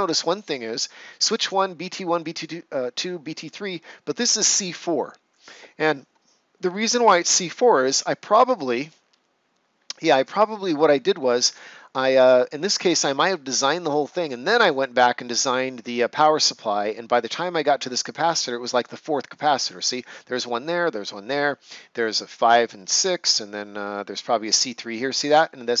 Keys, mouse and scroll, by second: 7.5 ctrl+scroll up 1, 7.6 ctrl+scroll down 1, 8.1 right click.